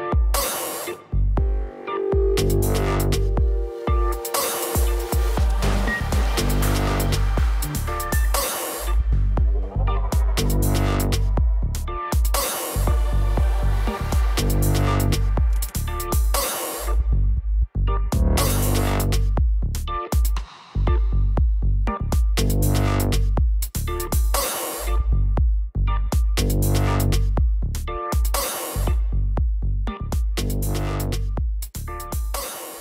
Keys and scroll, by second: 8.9 ctrl+z, 12.4 ctrl+z, 22.8 ctrl+d, 26.4-27.8 typing, 28.2 Return.